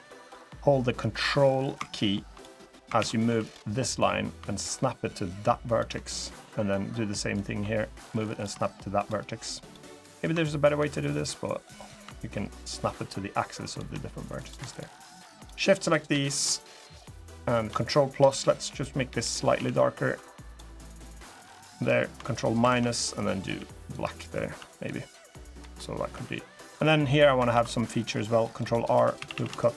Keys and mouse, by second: 0.8-2.0 drag, 2.7 ctrl+z, 3.0 2, 3.2 click, 3.8-5.5 drag, 7.1-8.2 ctrl+drag, 9.4 click, 9.9 ctrl+click, 11.6-13.5 ctrl+drag, 14.2 3, 15.1 shift+click, 17.8 ctrl+KP_Add, 18.8 g, 19.3 a, 19.5 g, 20.2 click, 21.2 g, 21.5 click, 22.3 ctrl+KP_Subtract, 23.2 g, 23.6 click, 24.3 Tab, 24.5 click, 25.3 middle click, 25.9 Tab, 26.4 middle click, 27.3 ctrl+r, 28.7 3, 28.9 a, 29.1 a, 29.3 alt+shift+click.